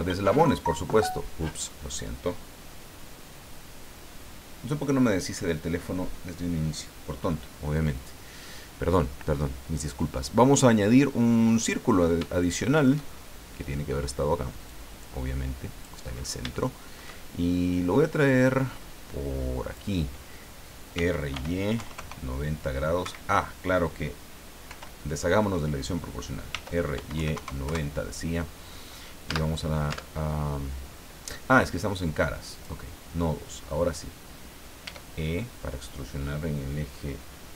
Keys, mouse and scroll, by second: 11.6 click, 12.3 shift+middle click, 13.1 shift+scroll down 2, 14.6-16.0 drag, 16.1-16.4 scroll up 3, 16.5 shift+middle click, 18.4-19.9 drag, 20.9 r, 21.3 y, 21.7 KP_9, 21.9 KP_0, 23.0 Escape, 24.6 o, 26.5 r, 26.9 y, 27.1 KP_9, 27.3 KP_0, 27.6 KP_Enter, 29.3 Tab, 32.5 click, 33.2 scroll up 1, 34.8 e.